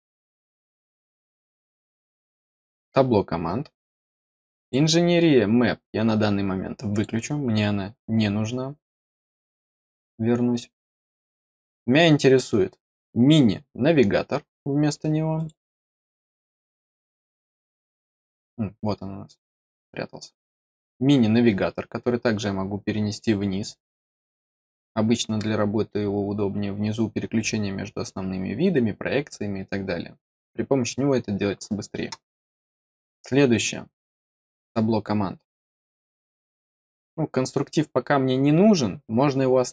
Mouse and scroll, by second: 4.5 click, 6.8 click, 9.4 click, 15.3 click, 20.8-23.9 drag, 33.0 click, 34.0 click.